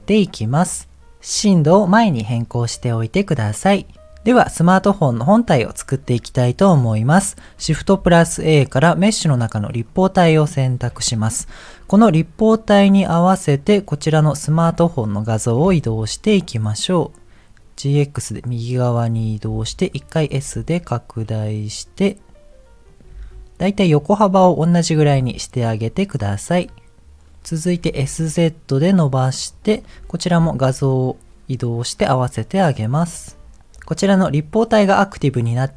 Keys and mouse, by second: 2.0 click, 8.2 shift+a, 11.0 KP_1, 15.5 g, 19.4 s, 20.5 g, 23.1 s, 25.1 g, 27.8 s, 30.3 g.